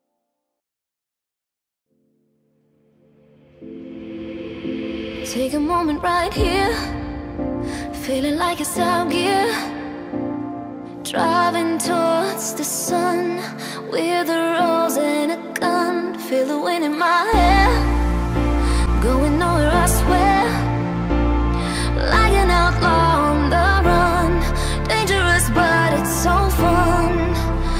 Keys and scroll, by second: 0.8 Delete, 9.5 ctrl+s.